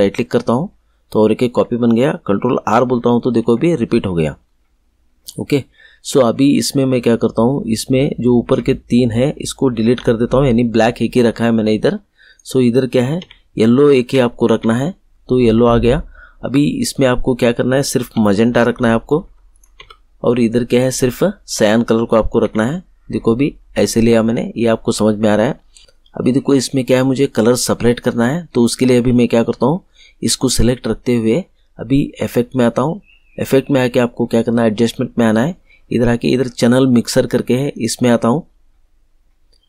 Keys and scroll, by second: 2.5 ctrl+r, 9.8 Delete, 13.1 Delete, 18.1 Delete, 22.4 Delete.